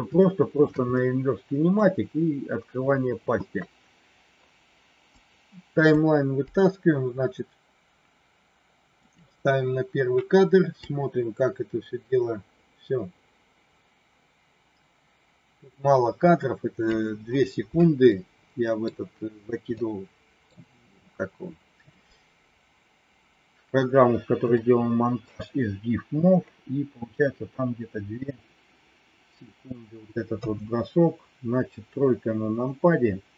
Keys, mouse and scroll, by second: 0.2 shift+middle click, 0.8 middle click, 5.2 click, 6.5-9.2 drag, 10.8-16.8 drag, 18.0 middle click, 19.8 middle click, 24.6 shift+middle click, 30.3 KP_3.